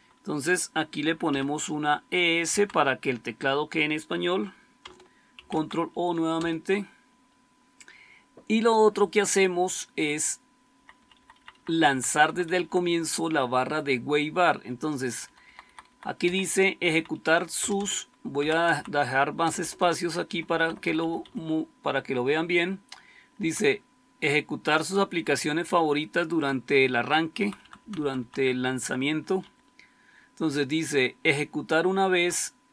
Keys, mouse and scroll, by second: 1.2 e, 2.4 Down, 5.3 ctrl+o, 6.2 Return, 10.7 Up, 10.9 Up, 11.0 Up, 11.2 Up, 11.5 Up, 11.6 Up, 11.8 Up, 12.0 Up, 12.2 Up, 12.4 Up, 12.5 Up, 12.7 Up, 14.6 Down, 15.2 Left, 15.3 Left, 15.6 Left, 15.8 Left, 16.1 Up, 16.7 Up, 17.5 Return, 17.7 Return, 18.3 Down, 18.5 Down, 18.6 Down, 19.3 Return, 19.5 Return, 19.7 Return, 20.3 Up, 20.4 Up, 20.7 Up, 20.9 Up, 21.1 Up, 23.3 Down, 24.1 Right, 24.6 Right, 26.3 Right, 26.4 Right, 27.3 Right, 27.5 Right, 27.7 Right, 27.9 Right, 28.1 Right, 28.4 Right, 29.4-32.7 Down, 30.6-32.0 Left.